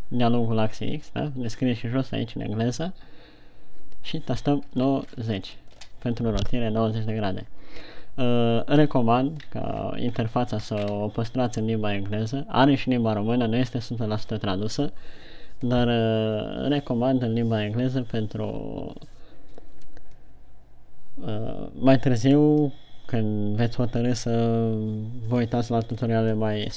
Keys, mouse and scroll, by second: 9.2-9.6 scroll up 1, 10.6 ctrl+scroll down 2, 11.2 shift+scroll up 2, 23.2 click.